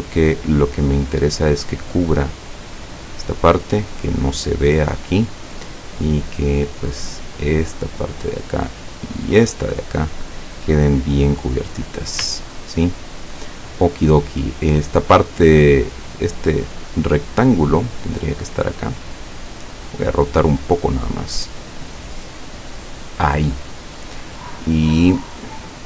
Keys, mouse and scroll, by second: 1.9-3.5 drag, 4.2 click, 7.4 click, 9.2-10.4 drag, 11.0-12.3 drag, 12.7-13.2 ctrl+scroll down 2, 13.2 ctrl+scroll down 1, 15.8 click, 16.8 click, 17.7-19.3 drag, 19.8 click, 20.6 click, 25.5-25.8 scroll down 1.